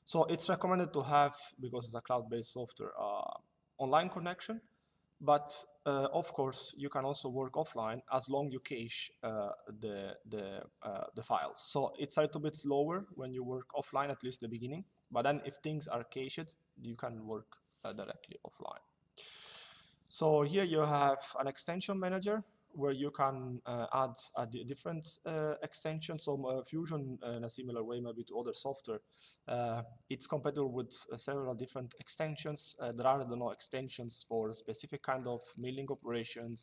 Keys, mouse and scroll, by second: 19.1 click.